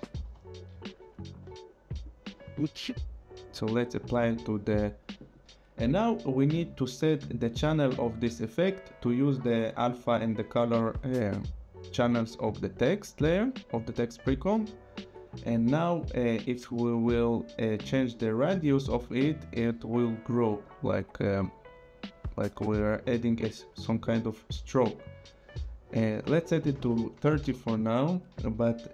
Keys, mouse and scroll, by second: 0.0-0.4 typing, 2.0 click, 7.7 click, 12.6 click, 17.8 click, 20.9 click, 26.7 KP_3, 26.7 KP_0, 27.4 Return.